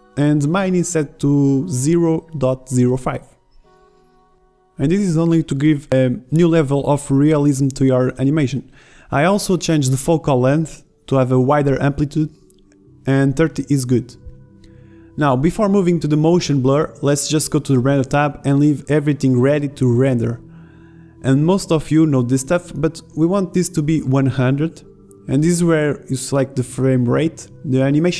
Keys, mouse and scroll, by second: 0.9 click, 13.5 right click, 14.0 s, 15.9 z, 16.9-17.3 drag, 21.2-23.0 drag, 23.0-24.2 right drag, 24.2-28.1 drag.